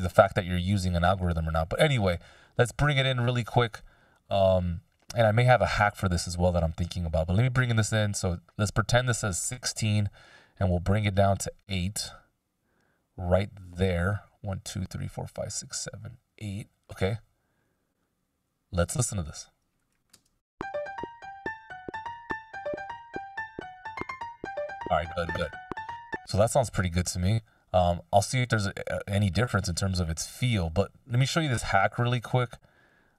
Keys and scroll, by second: 20.0 space, 24.6 super+z, 25.4 space, 26.5 Delete.